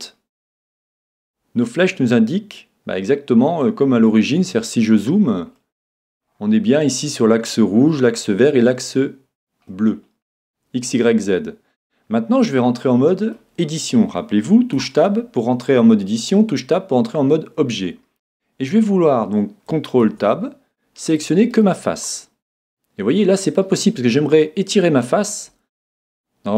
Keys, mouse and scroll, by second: 0.1-1.9 middle drag, 3.1-5.0 middle drag, 5.0-5.6 scroll down 1, 5.6-8.3 middle drag, 9.7-11.7 middle drag, 11.8-12.6 scroll up 1, 12.6-14.4 middle drag, 14.4 middle click, 14.8 Tab, 20.0 ctrl+Tab, 21.5-23.5 right drag, 22.1-24.0 middle drag, 24.3-26.1 middle drag.